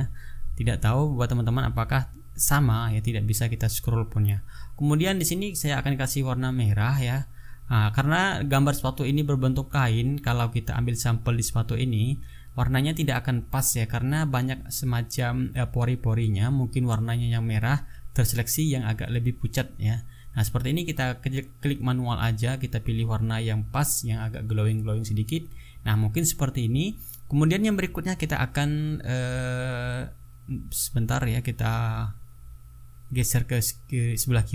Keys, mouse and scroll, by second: 2.5 ctrl+a, 3.2 ctrl+click, 4.6 click, 12.7 click, 13.6 click, 14.8 click, 15.9 click, 17.1 click, 18.1 click, 20.4 click, 22.0 click, 23.1 click, 23.7 click, 24.8 click, 27.0 click, 31.1 click, 32.6-34.5 drag.